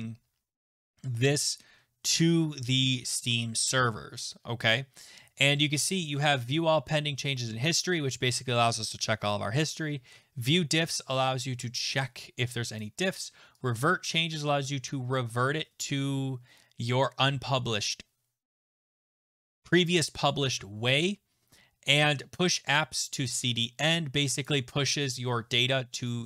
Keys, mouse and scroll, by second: 12.8 click, 13.1 click, 14.8 click, 19.0 click, 24.4 click.